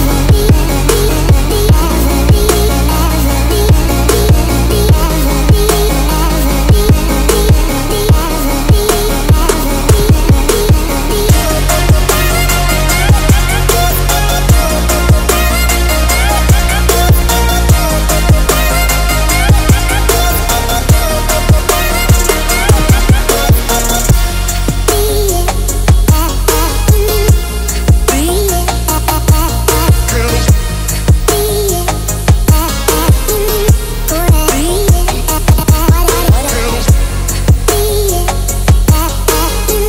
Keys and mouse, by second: 1.0-2.1 drag, 3.2 ctrl+s, 3.6 a, 3.8 a, 4.7 click, 5.1 click, 6.4 click, 7.4-9.6 drag, 8.4 KP_0, 10.3 ctrl+s, 10.8 a, 10.9 a, 16.1-20.1 drag, 21.1 n, 22.7 click, 26.4 click, 27.8 middle click, 29.5 middle click, 31.4-32.5 shift+drag, 33.9 middle click, 39.4 ctrl+s, 39.7 a.